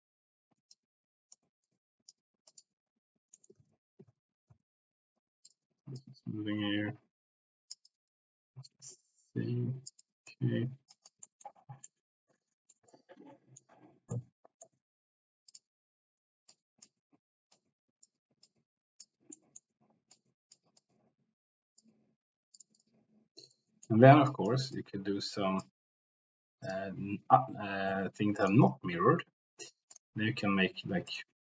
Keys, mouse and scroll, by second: 0.7 middle click, 1.1 click, 1.7 middle click, 2.0 click, 2.4 middle click, 3.3 middle click, 3.6 ctrl+z, 4.4 ctrl+z, 5.9-7.7 drag, 7.4 c, 7.8-9.9 drag, 10.0 click, 10.9 click, 11.2 middle click, 11.8 middle click, 12.9 middle click, 14.1 middle click, 15.5 click, 16.4 click, 17.5 click, 18.4 click, 19.3 middle click, 20.1 click, 20.7-21.8 drag, 22.5 click, 22.7 click, 23.5 click, 24.3 click, 24.7 click, 26.6 click, 28.3 click, 29.9 click.